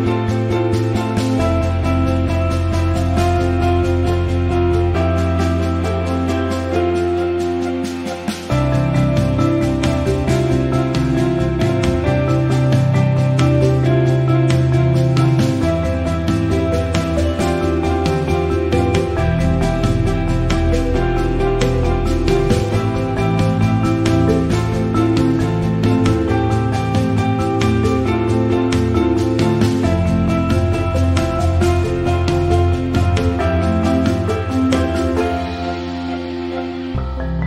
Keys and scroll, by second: 9.1 t, 13.4 c, 16.6 n, 18.0-18.6 typing.